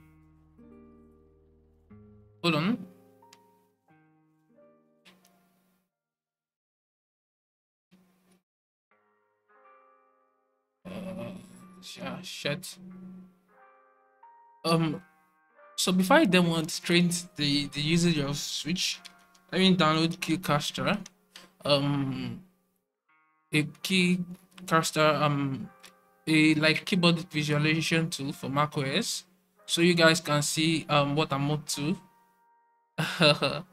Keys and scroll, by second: 1.0 alt+super+3, 3.1 alt+super+1, 4.5 alt+super+2, 5.7 alt+super+3, 7.9 alt+super+1, 9.2 alt+super+2, 10.5 alt+super+3, 12.6 alt+super+1, 14.0 alt+super+2, 15.2 alt+super+3.